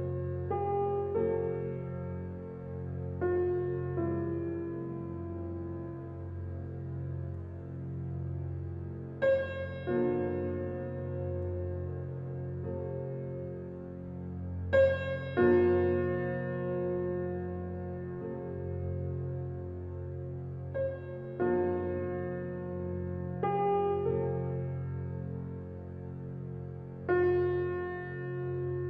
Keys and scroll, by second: 21.3 ctrl+g.